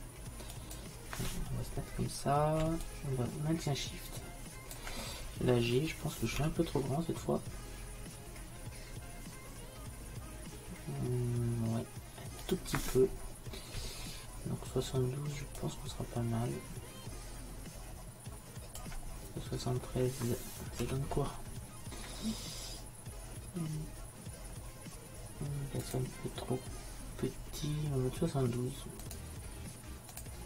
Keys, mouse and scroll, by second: 2.9-4.8 drag, 6.5 g, 15.6-20.9 drag, 20.9 g, 29.1-30.4 drag.